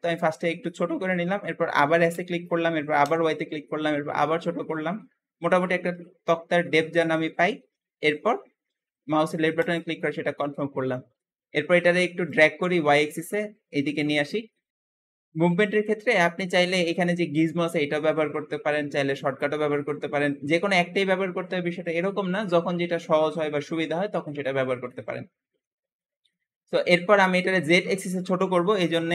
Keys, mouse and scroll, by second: 2.0 s, 10.3-12.1 middle drag, 12.1 click, 14.4 middle click, 24.8-29.0 middle drag.